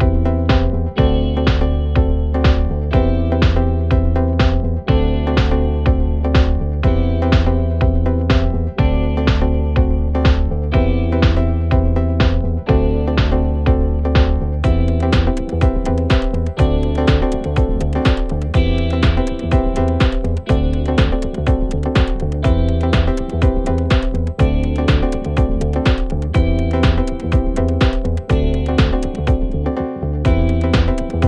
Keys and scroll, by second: 0.2 f, 1.9 f, 4.6 f, 5.9 f, 6.9 f, 7.9 f, 11.6 4, 18.6 ], 27.9 Delete, 28.7 ], 29.5 ].